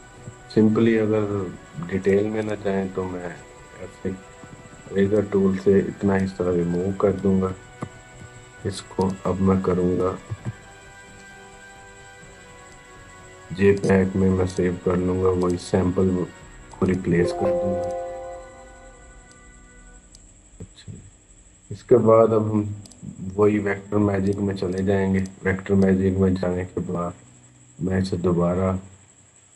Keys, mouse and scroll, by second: 1.8 right click, 2.2 click, 4.2-4.7 typing, 4.9-7.0 drag, 7.0 ctrl+-, 8.8 click, 10.1 ctrl+alt+s, 12.5 click, 22.7-29.5 drag.